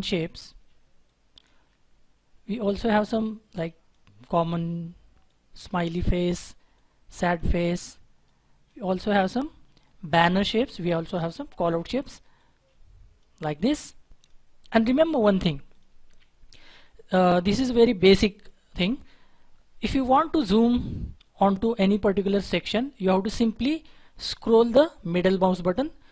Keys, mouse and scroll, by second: 3.1 double click, 15.2 Delete, 16.0 Delete, 16.7 Delete, 17.4 Delete.